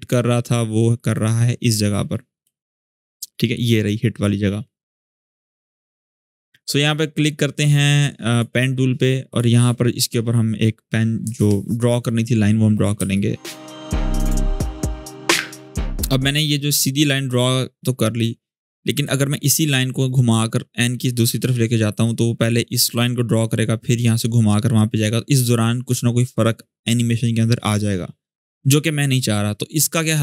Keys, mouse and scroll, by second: 1.3-2.2 scroll up 1, 2.2 space, 2.5 click, 2.7-3.1 space, 8.0 space, 9.9-11.6 scroll down 1, 11.9 scroll up 1, 12.7-14.7 typing, 12.9-13.4 click, 13.6 click, 13.8 click, 14.0 shift+click, 14.8 click, 15.3-15.6 scroll down 1, 15.6-19.0 drag, 29.2-30.2 scroll up 1.